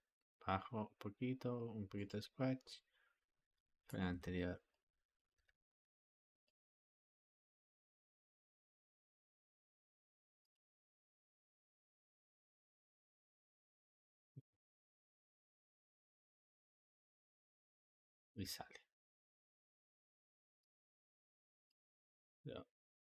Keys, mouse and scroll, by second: 2.6-3.8 drag, 4.0 g, 5.1 click, 5.2 g, 7.1 click, 7.2 g, 11.5 click, 11.6 g, 14.3-17.7 drag, 18.1 g, 21.6 click, 22.0 g.